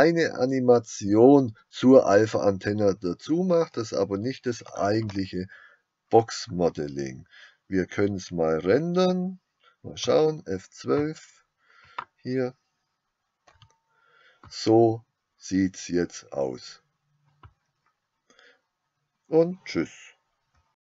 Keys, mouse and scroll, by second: 3.4-4.5 middle drag, 10.0 middle click, 12.1 click.